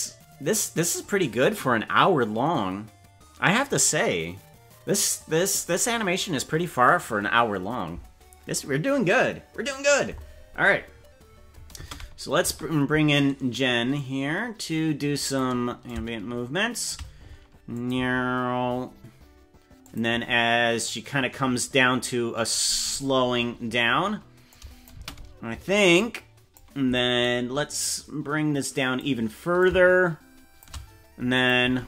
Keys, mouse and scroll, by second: 11.8 space, 12.4 space, 13.9-15.4 drag, 15.8-17.0 shift+drag, 17.7 click, 17.9 space, 18.6 scroll down 1, 18.8 space, 19.8 click, 20.2 space, 21.6 space, 24.5 click, 25.0 space, 25.6 space, 26.0 click, 27.8-29.0 drag, 29.6-30.6 shift+drag, 31.3 click, 31.6 space.